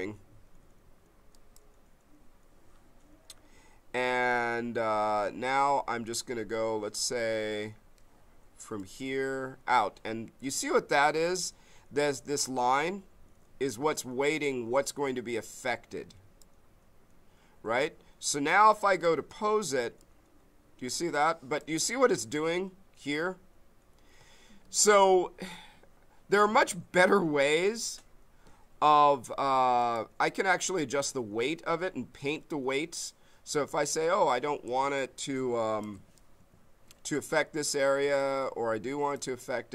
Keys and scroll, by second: 24.6 ctrl+z, 34.8 b.